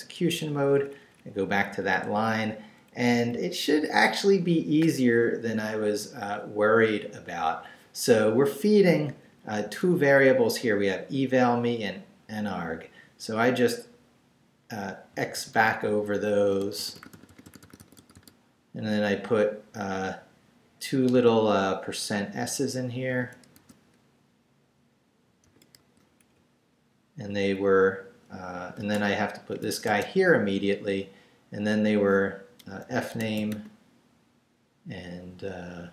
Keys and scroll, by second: 0.7 Up, 1.7 Down, 2.0 Left, 2.9 Right, 8.6 Left, 15.1 x, 18.8 Right, 21.1 i, 23.1 shift+5, 24.4 s, 25.4 shift+5, 26.3 Right, 28.8 space, 29.5 shift+space, 29.6 shift+5, 29.9 shift+space, 32.7-34.0 typing.